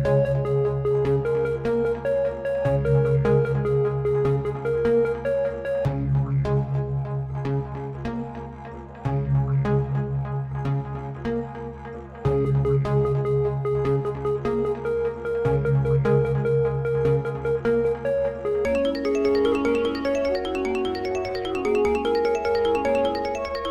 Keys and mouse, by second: 0.0 g, 16.9-18.9 drag.